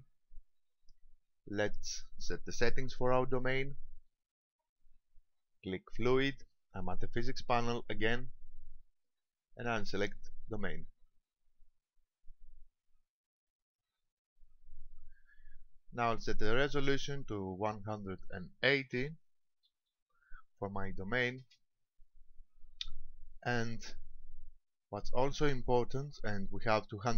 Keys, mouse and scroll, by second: 3.6 shift+middle click, 8.4 click, 10.4 click, 17.9 click.